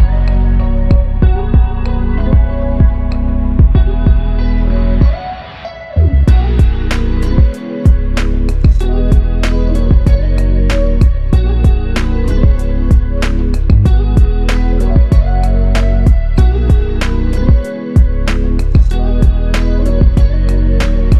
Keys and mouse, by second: 13.7 alt+click, 14.8 ctrl+alt+click.